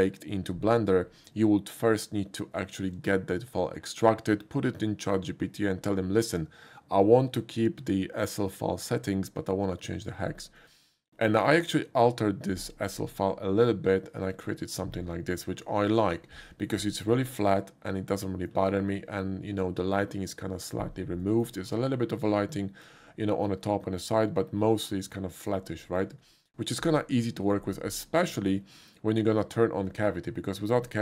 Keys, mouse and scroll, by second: 10.6 click, 11.5 click, 14.3 click, 16.7 middle click, 17.2-18.5 middle drag, 21.2 middle click, 22.4 middle click, 25.1 middle click, 25.9 shift+middle click, 28.4 shift+click, 29.4 click.